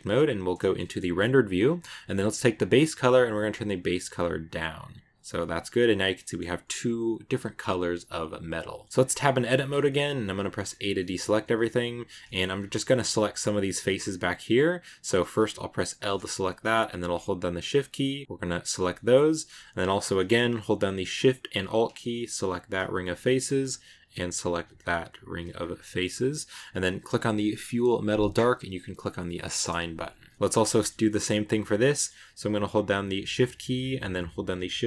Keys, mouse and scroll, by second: 0.6 shift+middle click, 1.4-2.0 scroll down 2, 2.4 click, 5.2-7.1 middle drag, 7.1 click, 8.8 middle click, 8.9 Tab, 9.1-10.5 shift+middle drag, 9.4 scroll up 1, 10.5 a, 10.8-12.4 middle drag, 12.4 scroll up 2, 12.7-15.7 middle drag, 15.8 l, 17.6 shift+right click, 18.4 shift+right click, 18.8 shift+middle click, 19.4-19.8 scroll up 3, 19.6 middle click, 22.4 alt+shift+right click, 22.9 shift+middle click, 23.5-25.0 scroll up 1, 25.0 alt+shift+right click, 25.4-26.4 scroll down 2, 26.4-27.4 scroll up 1, 27.4 click, 28.6-30.0 drag, 30.0 scroll down 1, 30.2 middle click, 30.3-30.9 scroll up 8, 30.4 Tab, 30.6 shift+middle click, 30.9 middle click, 31.4 right click, 31.8 middle click, 32.1-33.0 scroll up 1, 33.0 shift+right click.